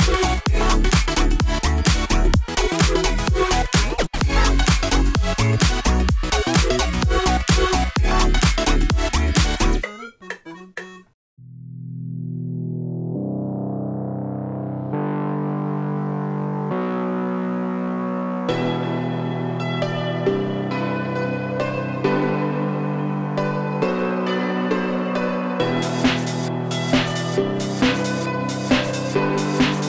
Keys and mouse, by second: 0.4 ctrl+b, 3.1-4.6 drag, 5.1 `, 6.0 `, 7.3 click, 8.4 g, 10.2 g, 11.2 click, 11.5 g, 12.4 ctrl+b, 14.5 shift+click, 15.2 ctrl+z, 15.6 ctrl+r, 17.3 g, 19.6 click, 19.8 ctrl+z, 19.8 h, 20.3 g, 21.4 click, 21.6 g, 23.1 click, 23.4 g, 24.4 `, 25.2 `, 27.1 click, 27.3 g, 28.4 click, 28.5 g, 29.3 click, 29.5 g.